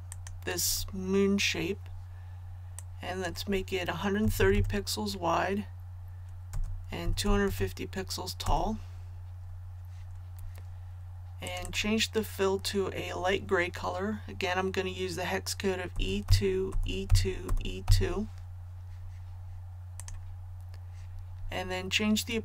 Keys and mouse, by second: 4.2 KP_1, 4.4 KP_3, 4.5 KP_0, 6.5 Tab, 7.0 KP_2, 7.2 KP_5, 7.4 KP_0, 8.4 Tab, 11.4 click, 15.9-17.8 typing, 20.0-22.4 drag.